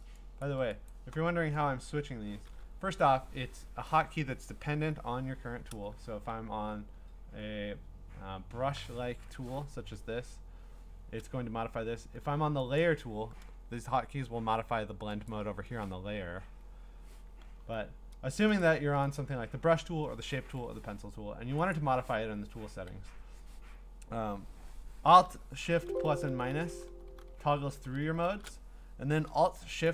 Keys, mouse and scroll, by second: 0.4 click, 0.9 click, 12.8 click, 15.3 click, 16.4 Escape, 17.5 b, 18.6 click, 19.2 click, 21.7 click, 23.6 Escape, 25.7 alt+shift+=, 25.9 alt+shift+=, 26.3 alt+shift+=, 26.5 alt+shift+=, 26.7 alt+shift+=, 26.9 alt+shift+=, 27.1 alt+shift+=, 27.3 alt+shift+=, 27.8 shift+=, 28.0 shift+=, 28.2 shift+=.